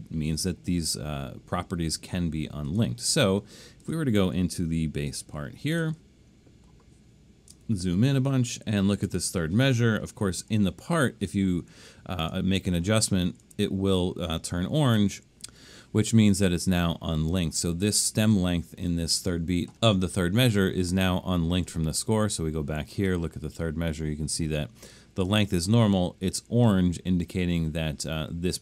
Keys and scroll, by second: 7.6 super+=, 7.9 super+=, 8.3 super+=, 8.9 super+=.